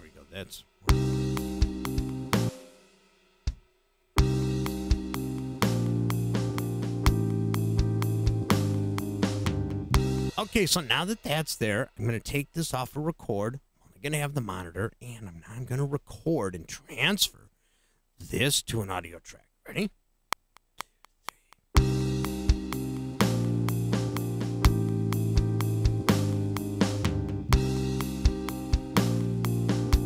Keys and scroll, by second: 0.7 space, 2.4 space, 4.0 space, 10.2 space, 20.2 *.